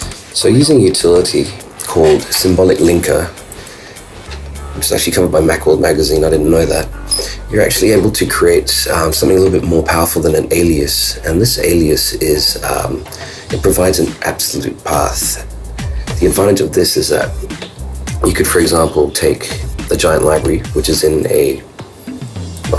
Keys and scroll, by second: 0.0 super+Tab.